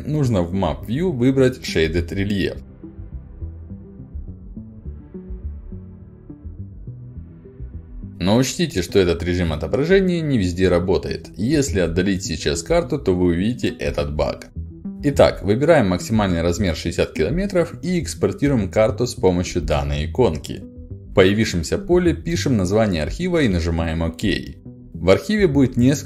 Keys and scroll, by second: 20.5-23.3 typing.